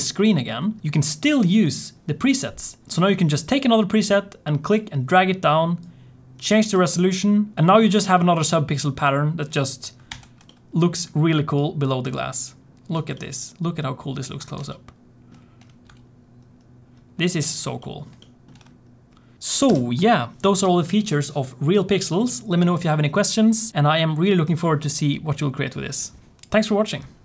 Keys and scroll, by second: 10.0 alt+h, 19.4 ctrl+space, 19.6 ctrl+space.